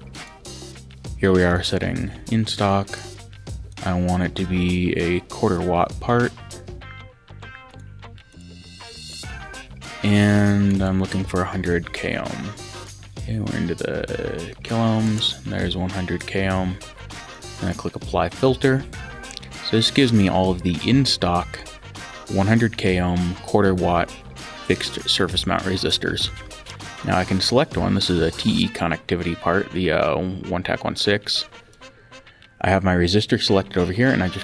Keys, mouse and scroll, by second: 0.1 click, 1.5 click, 3.7 click, 7.7 click, 9.8 click, 16.1 click, 17.3 click, 27.0 click.